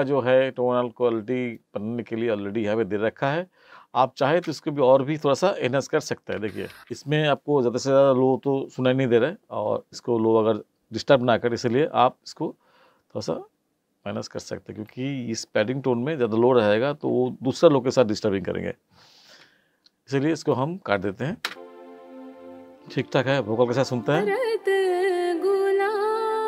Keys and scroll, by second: 6.4 space, 21.4 space.